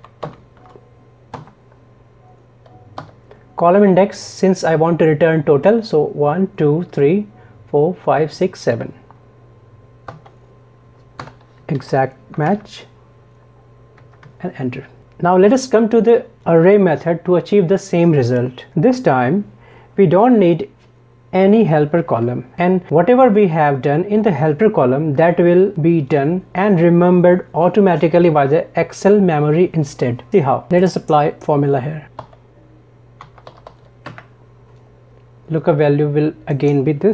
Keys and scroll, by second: 0.3 ctrl+shift+Right.